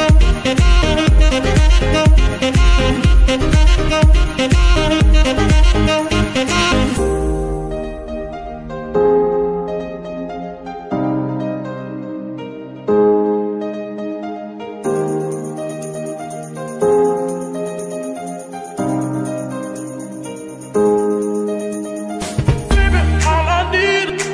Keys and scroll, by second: 23.4 ctrl+Tab.